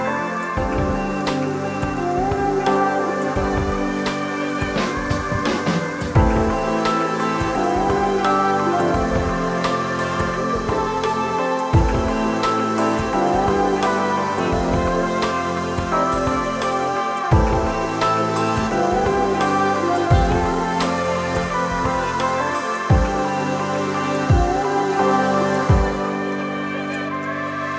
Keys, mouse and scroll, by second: 1.1 click, 2.3 click, 4.0 click, 4.9 click, 5.4 drag, 7.2 drag, 8.1 click, 9.0 click, 10.3 click, 12.5 click, 13.4 click, 14.5 click, 15.8 click, 16.7 click, 17.6 click, 19.0 click, 21.1 click, 22.2 drag, 22.7 drag, 24.6 drag, 25.5 drag, 26.6 click, 27.6 n.